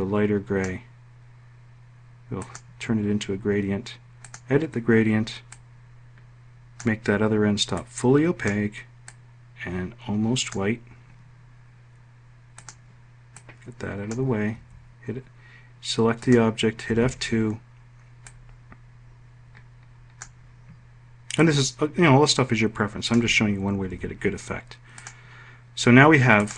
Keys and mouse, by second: 14.0 F1, 16.4 F2, 20.8-22.7 ctrl+drag, 23.3 F1.